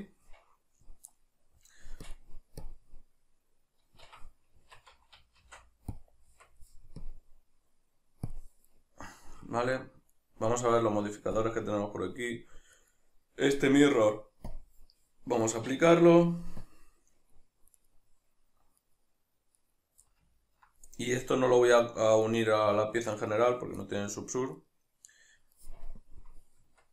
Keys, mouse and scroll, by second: 1.1-2.0 middle drag, 2.0-8.8 drag, 4.1 Escape, 5.4 shift+s, 6.3 Tab, 8.8-11.4 middle drag, 11.4 click, 12.8 right click, 14.5 click, 15.5 right click, 16.6 click, 17.5 middle click, 17.8 right click, 18.8 right click, 19.6 right click, 20.1-20.9 middle drag, 20.9 right click, 21.3-22.3 middle drag, 22.3 right click, 23.1 right click, 23.9-24.6 middle drag, 24.6 right click, 26.6 Tab.